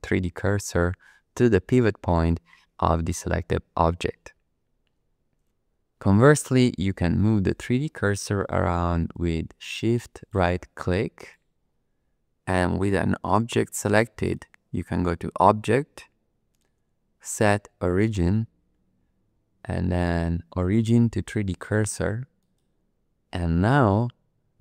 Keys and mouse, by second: 7.0 shift+click, 7.5 shift+click, 8.0 shift+click, 8.5 shift+click, 9.1 shift+click, 9.6 shift+click, 10.1 shift+click, 11.1 shift+click, 14.2-22.6 drag.